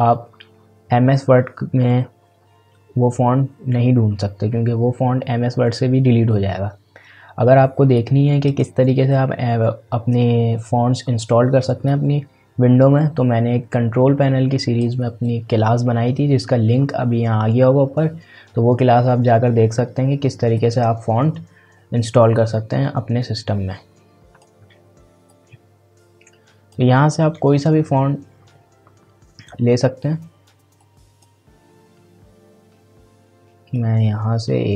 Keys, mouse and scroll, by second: 7.9-10.7 drag, 11.8-17.2 drag, 20.5-29.0 drag, 30.8-33.6 drag, 33.7-34.7 drag.